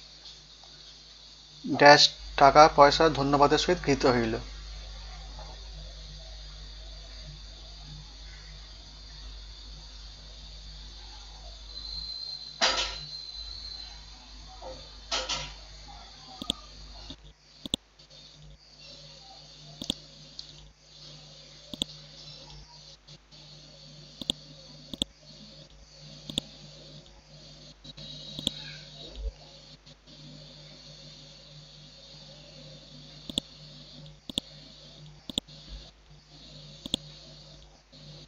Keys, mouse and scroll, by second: 0.0-1.4 typing, 4.6-5.4 typing, 6.5-8.5 typing, 9.2 Left, 9.6 typing, 11.5 ctrl+a, 11.7 Down, 12.0 Return, 12.1-14.8 typing, 16.4 click, 32.0-32.5 scroll down 1, 33.3 click, 35.3 shift+click, 36.8 click.